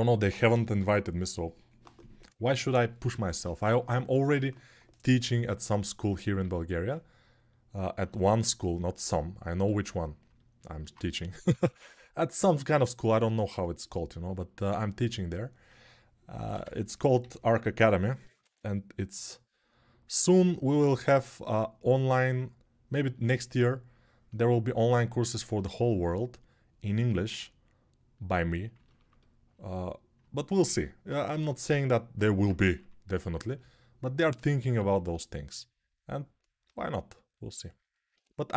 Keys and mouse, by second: 6.2 alt+q, 11.1 p, 11.3 [, 11.5 [, 16.3-38.5 ctrl+alt+drag, 17.0 g, 18.0 ], 18.2 ], 30.4 alt+q, 32.5 1, 34.6 3, 36.4 g.